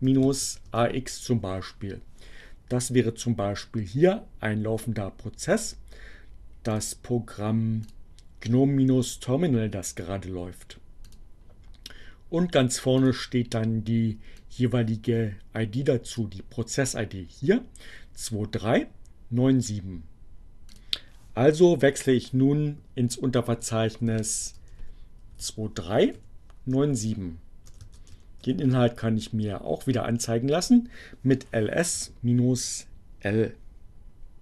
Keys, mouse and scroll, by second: 0.0-0.6 typing, 2.9-4.8 drag, 6.6 click, 7.8 click, 10.2-11.3 drag, 12.6 click, 13.4-15.5 drag, 20.5 click, 22.3-23.2 typing, 25.0-26.2 typing, 26.3 Return, 27.4-28.3 typing, 30.6 Return.